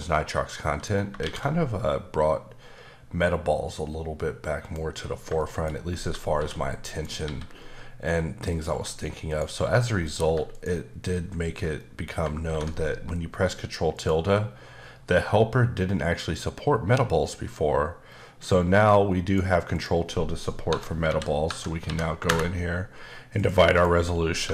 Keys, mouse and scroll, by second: 0.5 middle click, 1.2 shift+a, 4.6 click, 5.1 scroll down 1, 5.4 shift+middle click, 5.7-6.0 scroll up 2, 6.3 shift+d, 6.9 click, 8.5 click, 8.7 g, 9.3 click, 9.6 s, 10.0 click, 10.2 g, 10.5 click, 11.7 middle click, 13.9 click, 19.3 click, 19.7 click, 20.7 KP_Divide, 21.0 KP_2, 21.4 KP_Divide, 21.8 KP_2, 22.2 KP_Enter, 23.3 click, 23.7 click, 24.4 KP_Divide.